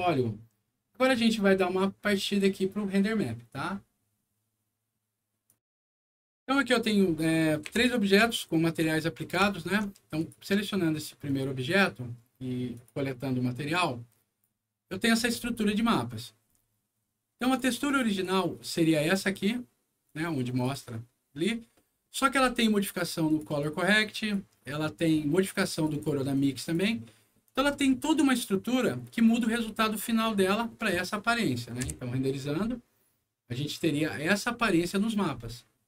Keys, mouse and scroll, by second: 1.1 click, 5.4 click, 7.1 middle click, 7.6 p, 8.2 alt+middle click, 9.0 alt+middle click, 9.5 alt+middle click, 10.1 alt+click, 11.2 alt+click, 12.7 alt+click, 13.7 click, 14.8 middle click, 15.3-16.1 scroll down 3, 16.4 scroll up 1, 16.8 middle click, 17.5 click, 17.8 click, 18.0 click, 18.6 click, 20.0 click, 21.7 middle click, 22.3 scroll up 1, 23.2 click, 23.4 click, 23.8 click, 24.6 middle click, 25.7 click, 25.9 click, 26.3 click, 27.5-28.0 scroll down 2, 28.8 middle click, 29.5 scroll up 1, 31.0 middle click, 31.8 F9.